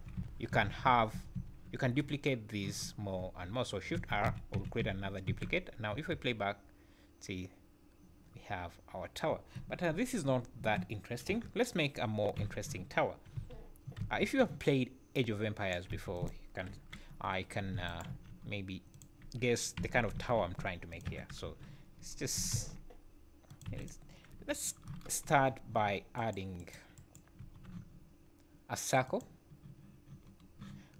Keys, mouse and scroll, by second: 0.2-0.8 shift+r, 1.1 shift+r, 1.4 shift+r, 1.7 scroll down 3, 4.0-5.9 typing, 8.0 scroll down 1, 10.6 Escape, 11.3 KP_1, 12.4 z, 13.3 v, 14.0 b, 15.9 x, 16.8 KP_7, 17.3-17.7 scroll up 4, 17.9 shift+right click, 18.1 shift+a, 19.8 s, 21.0 KP_1, 21.4 KP_Decimal, 22.2 scroll down 5, 22.3 s, 23.7 x, 24.3 KP_7, 25.2-25.5 scroll down 9, 26.2 shift+right click, 26.6 shift+right click, 27.0 shift+right click, 27.4 shift+a, 30.2 scroll up 4.